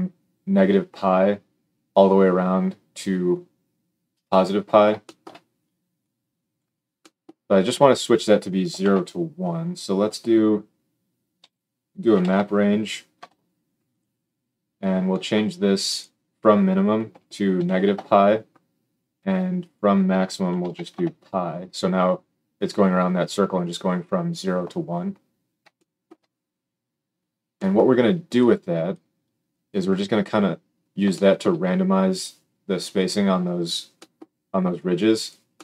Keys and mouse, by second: 5.9-13.9 drag, 8.7 shift+a, 13.9-15.8 middle drag, 15.8-35.6 drag.